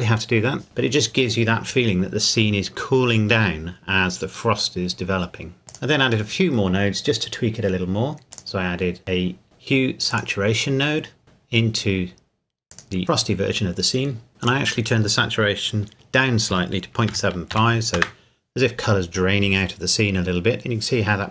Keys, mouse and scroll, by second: 2.0 scroll down 1, 5.7 click, 8.2 click, 10.1 click, 12.7 click, 14.4 click, 16.6 KP_Decimal, 17.1 KP_7, 17.5 KP_5, 18.0 KP_Enter.